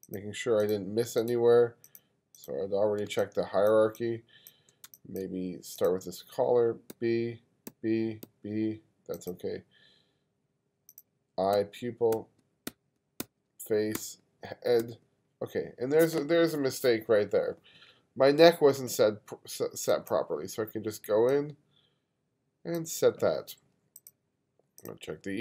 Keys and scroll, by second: 3.1 space, 4.9 space, 7.0 b, 7.7 b, 11.6 b, 14.0 b, 14.8 b.